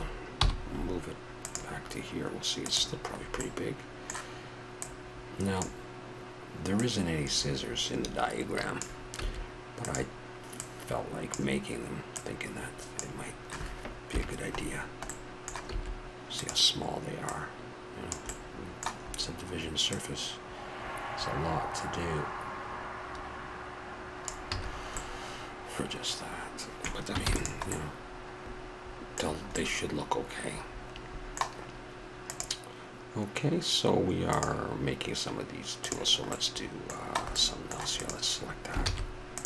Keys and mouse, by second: 0.4 m, 2.6-3.4 drag, 3.4-4.0 middle drag, 4.0-4.4 drag, 4.4-4.9 middle drag, 4.9-6.7 drag, 6.9-8.6 drag, 9.2 s, 14.1 KP_Decimal, 15.7 s, 18.4-18.7 middle drag, 19.0-19.9 middle drag, 19.9-21.7 drag, 21.8-24.0 middle drag, 24.5 a, 24.7-25.2 middle drag, 25.2-25.6 drag, 27.2 ctrl+s, 29.9 middle click, 31.0 middle click, 36.3-36.7 middle drag, 38.0-38.8 drag, 38.8 shift+s.